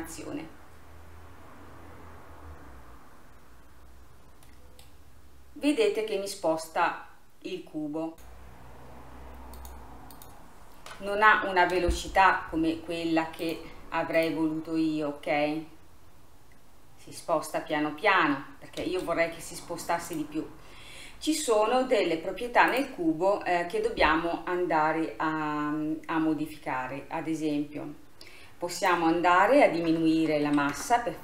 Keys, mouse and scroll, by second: 4.6-7.6 middle drag, 8.1-11.8 drag, 11.8 space, 13.5 click, 14.2-17.3 drag, 18.9 space, 20.1 click, 20.8-22.8 scroll down 5, 22.8 click, 26.3-28.8 scroll up 2, 28.8-31.2 drag.